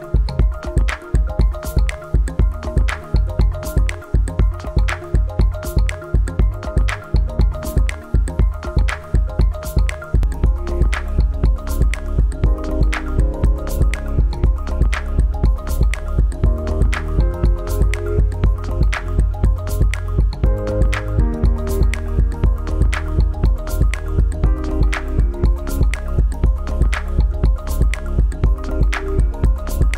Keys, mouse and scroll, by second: 1.6 click, 10.3 click, 17.2 right click, 18.1 click, 21.0-21.4 scroll down 1, 22.9-23.4 scroll down 1, 23.4-24.9 scroll down 1, 25.0 click, 26.2 right click, 27.2 click.